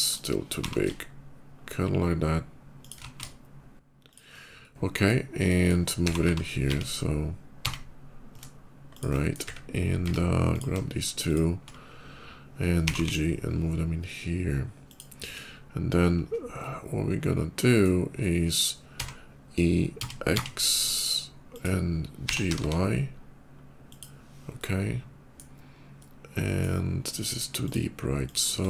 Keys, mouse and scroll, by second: 0.3 g, 0.9 shift+g, 2.6 shift+click, 2.8 s, 3.9 click, 4.6 shift+middle click, 5.2 shift+middle click, 6.0 g, 6.1 y, 6.5 x, 8.8 shift+click, 9.0 shift+middle click, 9.7 Tab, 10.3 click, 11.1 click, 12.7 g, 13.4 g, 14.7 click, 16.3-17.6 shift+middle drag, 18.8 e, 19.8 x, 20.2 x, 21.4 click, 22.1 g, 22.3 y, 22.4 y, 22.6 g, 23.7 click, 24.2-25.2 middle drag, 25.7 middle click, 25.9 click, 26.2 middle click, 27.5 shift+click, 28.1 shift+click, 28.5 shift+middle click.